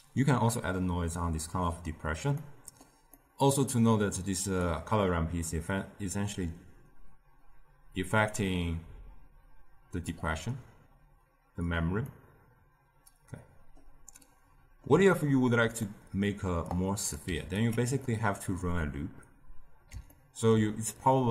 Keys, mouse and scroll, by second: 4.5-7.7 drag, 12.0-16.6 middle drag, 16.6-17.2 drag, 17.2 g, 18.0-21.3 middle drag.